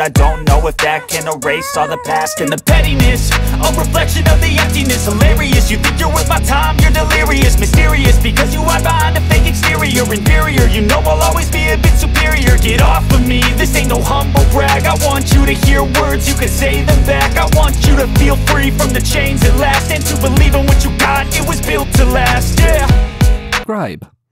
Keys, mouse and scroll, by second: 7.3 click, 11.1 click, 11.8 z, 12.1-18.9 drag, 19.3 ctrl+0, 20.9 click.